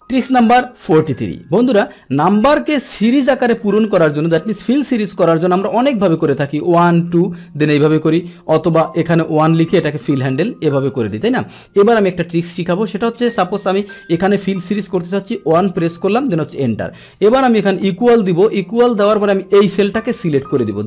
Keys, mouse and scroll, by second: 0.0 click, 2.2 click, 5.7 click, 6.2-6.7 drag, 7.4 click, 8.1 click, 9.3 click, 9.8 click, 10.8 click, 11.8 click, 12.5 Delete, 13.8 click, 16.5 click, 19.5 Up.